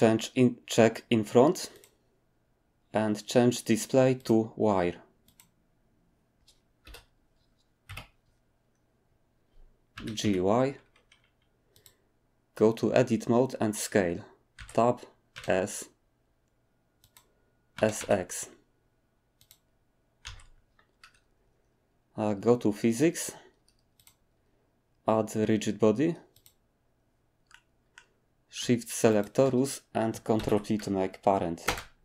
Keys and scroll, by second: 6.8 7, 7.8 ., 9.9-10.2 typing, 14.5 Tab, 15.1-15.8 typing, 17.7-18.5 typing, 20.2 Tab, 30.4 ctrl+p, 31.6 Return.